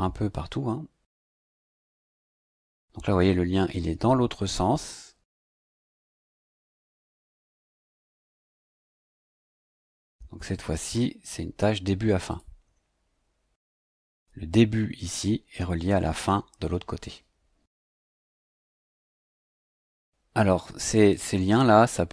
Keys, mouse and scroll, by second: 6.4 click, 7.5 click, 8.7 click, 10.5 click, 12.3 click, 18.7 click.